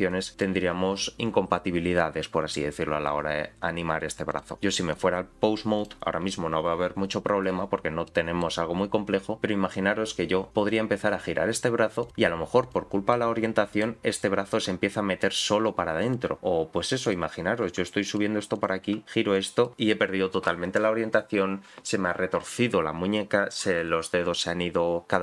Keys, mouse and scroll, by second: 0.3 click, 4.3 click, 5.8 click, 7.6-8.1 scroll down 3, 8.1 middle click, 8.7-9.3 scroll up 1, 9.3 middle click, 9.3-10.6 scroll up 1, 10.6 r, 12.6 click, 13.1 middle click, 14.4 r, 16.4 middle click, 17.0 click, 17.6 r, 18.5 click, 19.0 r, 19.6 middle click.